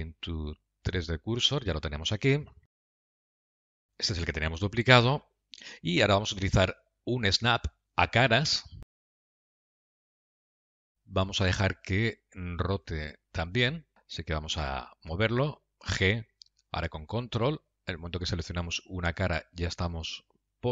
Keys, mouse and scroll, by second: 3.5 scroll down 5, 3.7 middle click, 3.8 g, 5.4 middle click, 6.4 shift+middle click, 7.1 middle click, 9.2 click, 14.4 g.